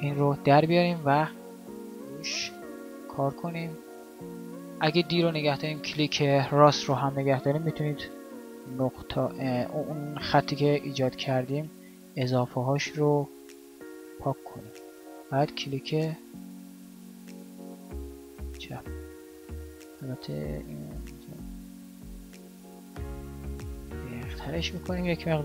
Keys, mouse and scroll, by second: 3.1 d, 14.4-24.5 d.